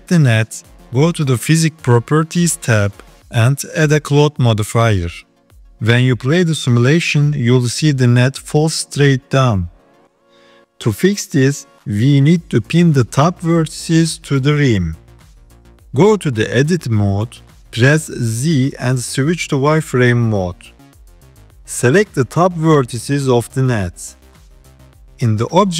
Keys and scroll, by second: 15.5 Tab, 16.8 z, 19.3 KP_3.